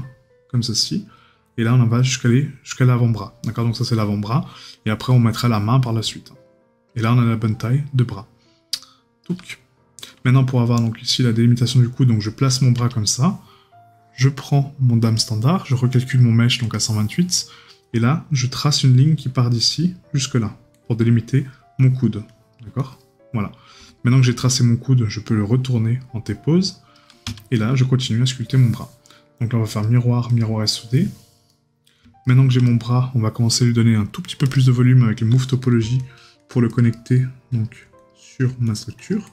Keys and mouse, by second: 31.5 right click, 36.9 right click.